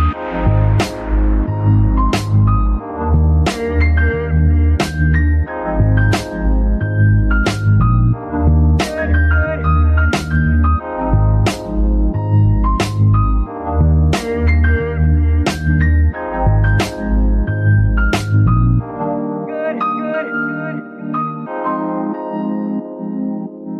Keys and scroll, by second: 0.5 KP_3, 2.3 g, 2.8 Escape, 7.4 Delete, 7.6 Delete, 10.2 f, 13.5 g, 15.6 Tab, 16.6 z, 17.0 s, 20.7 Tab, 22.1 g.